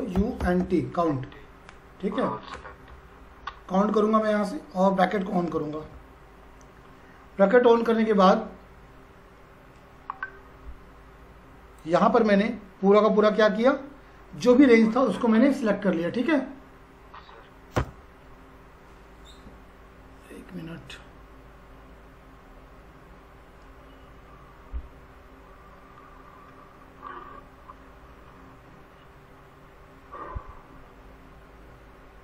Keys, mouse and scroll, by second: 0.0-1.1 typing, 5.8 shift+9, 11.8 click, 17.8 Return.